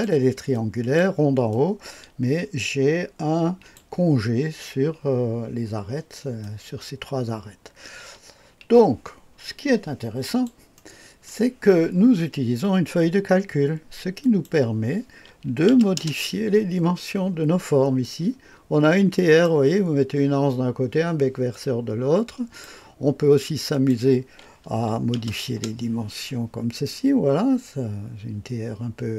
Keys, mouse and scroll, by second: 0.5 click, 1.5-3.8 drag, 6.4-10.5 drag, 10.8 middle click, 14.2 click, 15.5 KP_8, 15.7 KP_0, 16.0 Return, 18.0-20.1 drag, 21.5-22.7 drag, 23.7 click, 24.9 KP_6, 25.2 KP_0, 25.5 Return, 26.9-29.1 drag.